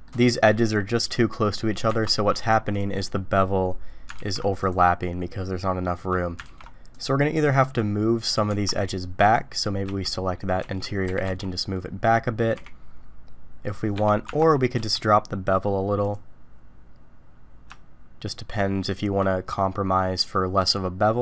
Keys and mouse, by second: 1.9 Tab, 3.1 middle click, 4.1 alt+v, 8.5 Tab, 9.2 click, 9.8 z, 10.6 z, 11.1 g, 14.2 Tab, 14.8 q.